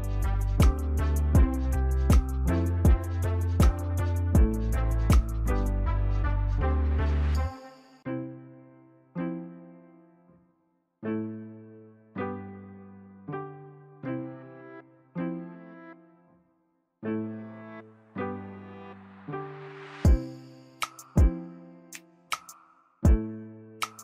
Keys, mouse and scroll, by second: 1.3 ctrl+j, 5.0 ctrl+click, 16.9 shift+click, 18.8 ctrl+g, 20.2 ctrl+-, 20.6 ctrl+-, 21.1 ctrl+-, 21.9 ctrl+=, 22.5 ctrl+=.